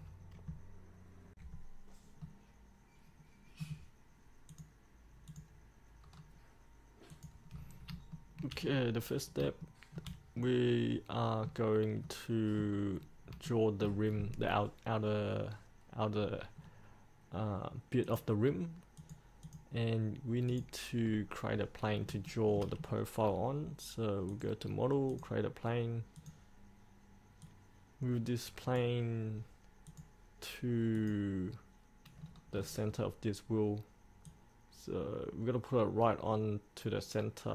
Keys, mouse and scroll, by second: 1.6 middle click, 4.7 click, 6.3-7.3 scroll up 1, 7.3 click, 7.7-8.1 scroll up 1, 8.3 shift+middle click, 8.8-9.6 scroll down 1, 9.8 shift+middle click, 10.6 middle click, 13.1-13.5 scroll down 1, 13.7 shift+middle click, 14.3-16.7 scroll up 1, 16.7-18.2 scroll down 1, 18.2 click, 21.2-22.3 scroll up 1, 22.4 shift+middle click, 23.0-24.5 scroll down 1, 24.5-29.4 drag, 32.3-33.1 scroll down 1, 34.5-37.5 drag.